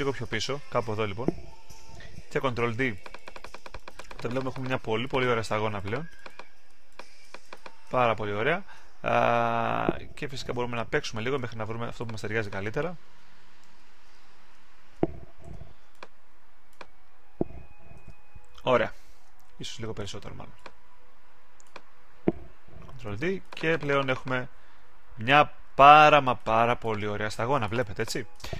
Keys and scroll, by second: 2.4 super+d, 10.5 alt+super+z, 15.4 super+z, 17.9 super+d, 19.4 super+z, 22.9 super+d.